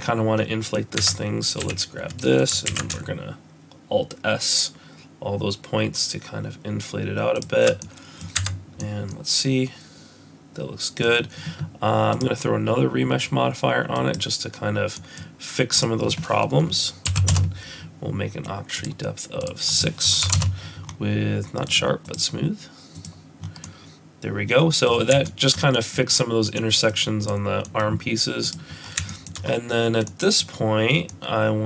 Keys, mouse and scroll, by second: 1.0 Tab, 1.6 a, 2.7 alt+s, 7.8 middle click, 8.4 Tab, 8.8 middle click, 12.1 click, 14.9 middle click, 15.8 click, 19.4 click, 21.7 click, 22.1 click, 23.6 middle click, 24.9 scroll up 4, 25.3 shift+middle click, 25.7 middle click, 26.6 middle click, 27.7 middle click, 28.4 click, 28.8 scroll down 3, 29.1 shift+middle click, 29.4 scroll up 2, 30.1 middle click, 31.0 scroll down 1, 31.1 middle click.